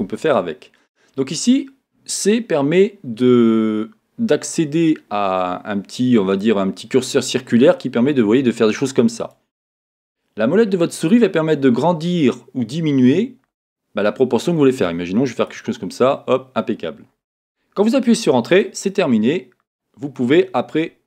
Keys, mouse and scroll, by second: 18.6 Return, 19.6-20.1 scroll down 2, 20.1-21.0 middle drag.